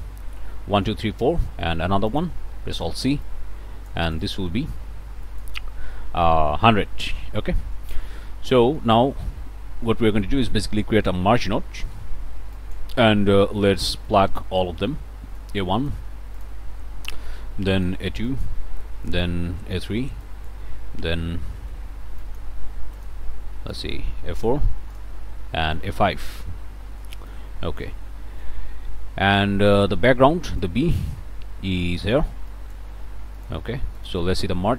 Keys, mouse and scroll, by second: 1.5 click, 2.1 click, 2.8 alt+c, 3.2-4.5 alt+drag, 5.2 click, 6.8 1, 7.0 0, 7.6 Return, 8.3 scroll down 2, 8.6 scroll up 2, 8.6 click, 8.9 scroll down 2, 9.2 scroll up 2, 9.2 click, 9.5 scroll down 2, 9.7 scroll up 2, 9.9 click, 10.4 click, 11.9 m, 12.5 click, 14.0 click, 15.4 click, 16.3 click, 17.2 click, 18.2 click, 19.1 click, 20.2 click, 21.3 scroll up 2, 21.6 click, 22.2 click, 22.9 click, 23.7 click, 24.9 click, 25.7-27.2 drag, 27.3 click, 28.4-29.9 drag, 30.6-32.3 drag, 32.5 click, 33.4 click, 34.0 click.